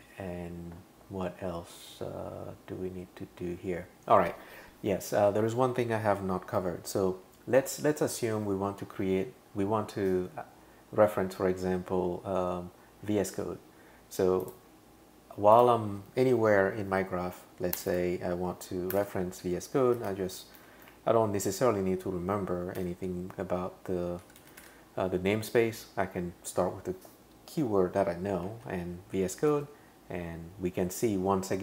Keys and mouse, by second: 14.4 click, 15.5 click, 17.8 Return, 17.9 Return, 18.9-20.9 typing, 22.8 typing, 24.0-25.1 typing, 29.5 Page_Down.